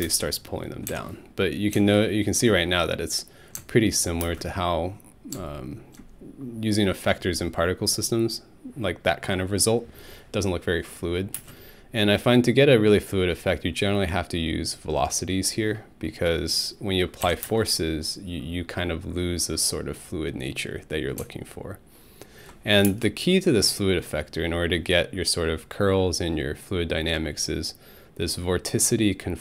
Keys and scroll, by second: 0.0 space, 0.9 Home, 4.2 alt+space, 11.4 space, 17.2 Home, 17.4 space, 22.9 alt+space.